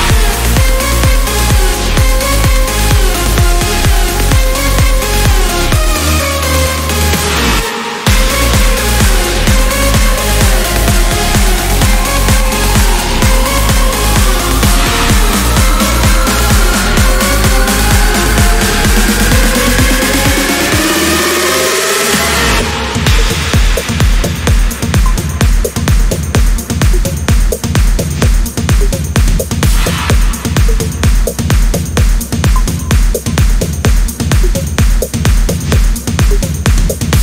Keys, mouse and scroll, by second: 0.6 click, 3.4 click, 6.2 click, 7.8 click, 9.4 click, 12.5 1, 13.4 2, 15.6 0, 17.0 click, 18.8 click, 19.4 scroll down 1, 20.1-20.4 scroll up 1, 20.8 click, 22.8 scroll up 1, 25.4-27.2 drag, 27.6 click, 28.5-28.8 scroll down 1, 29.2 click, 31.4 click, 34.6-34.9 scroll up 1, 35.6 click, 36.2 scroll down 1.